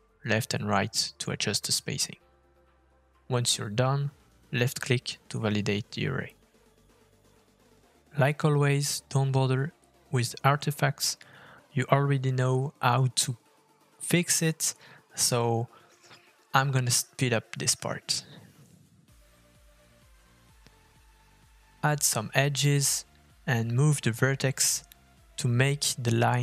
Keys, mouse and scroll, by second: 7.3 middle click, 9.9 scroll up 2, 10.3 middle click, 11.3-12.1 scroll down 3, 11.8 middle click, 13.1 f, 14.1 middle click, 14.3-15.7 scroll up 3, 14.5 shift+middle click, 16.4-17.6 scroll down 4, 17.0 middle click, 17.8-18.5 scroll down 1, 18.5 click, 19.0 click, 19.3 click, 20.4 shift+middle click, 21.6 Tab, 22.7 click, 23.8 g.